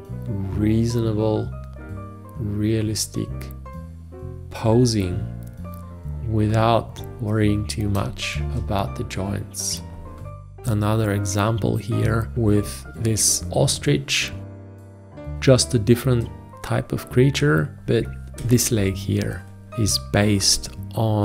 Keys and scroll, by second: 8.0 space, 13.2 F2, 18.4 ctrl+v.